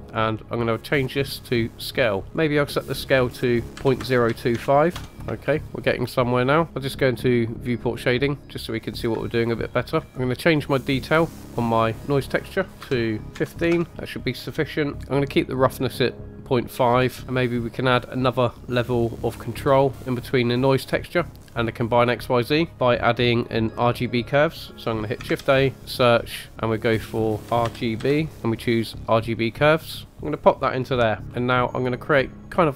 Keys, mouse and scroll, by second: 1.1 click, 1.9 middle click, 2.3-5.0 drag, 5.1 scroll up 3, 5.4-5.8 shift+middle drag, 8.0 click, 8.5 middle click, 9.4 shift+middle click, 10.1-10.5 scroll up 2, 10.6-13.8 drag, 17.2 middle click, 17.2 scroll down 2, 17.5 click, 19.6 click, 25.2 shift+a, 30.1-31.1 typing, 30.2 click, 31.2 middle click, 31.2 scroll down 1, 31.3 scroll down 1.